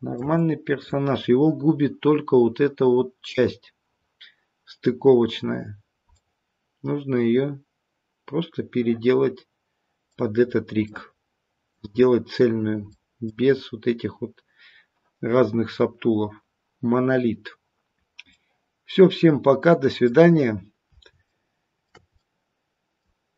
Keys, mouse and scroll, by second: 0.1 shift+middle click, 0.3 middle click, 6.1 middle click, 10.3-12.0 scroll down 3, 10.8 middle click, 12.9 middle click, 13.4-15.8 scroll up 1, 15.8 scroll up 3, 17.9-20.9 scroll down 3, 18.3 middle click, 21.2 shift+middle click, 22.1 middle click.